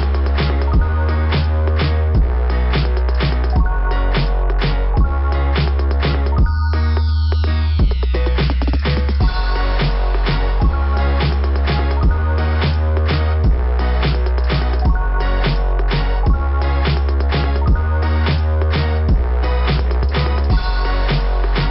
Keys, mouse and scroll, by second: 0.0 click, 4.5 click, 5.0 click, 5.0 click, 7.1 click, 9.3 click, 9.6 click, 9.7 click, 9.9 click, 14.2 scroll up 2, 18.1 scroll down 2, 19.4 scroll down 2.